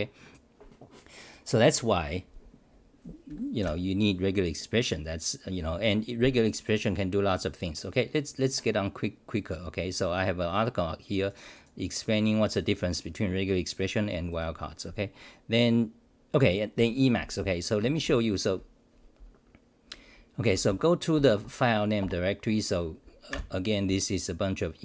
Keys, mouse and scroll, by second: 3.6 ctrl+r, 21.2 <, 22.0 Return.